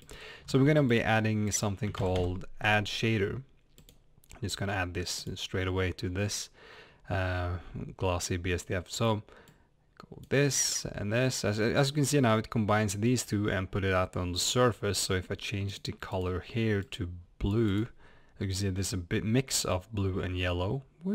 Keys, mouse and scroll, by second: 3.8 d, 3.9 click, 9.5 click, 15.7 click.